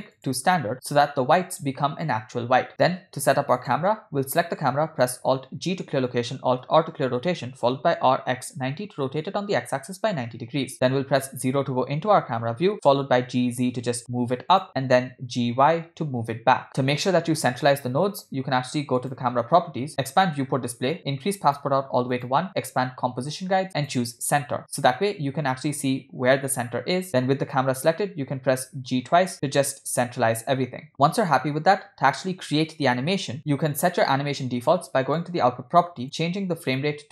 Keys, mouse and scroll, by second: 3.6 click, 5.4 alt+g, 6.6 alt+r, 7.7 r, 10.9 KP_0, 12.2 g, 15.0 g, 18.9 click, 19.9 click, 20.3-21.0 scroll down 2, 21.0 scroll down 1, 21.0 click, 22.1 click, 22.6-23.2 scroll down 3, 23.7 click, 28.3 g, 30.9 click, 35.0 click, 36.0-37.1 drag.